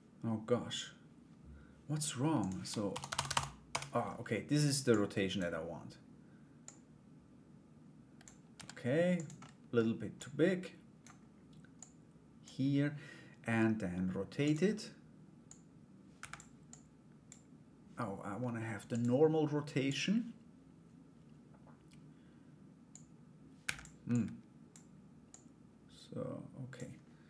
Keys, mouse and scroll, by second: 2.0-3.6 drag, 4.5 click, 6.2-7.8 drag, 9.0 middle click, 9.7 click, 11.3 click, 15.0 click, 16.2 click, 18.5-19.8 drag, 22.5 click, 23.7 click, 24.8-26.3 drag.